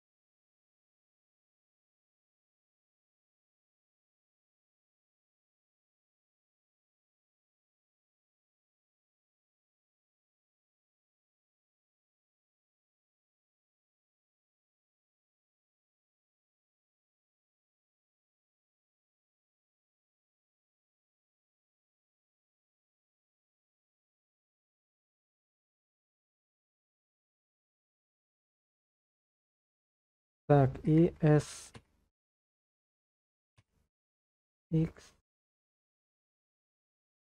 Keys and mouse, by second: 32.2 x, 34.0 x.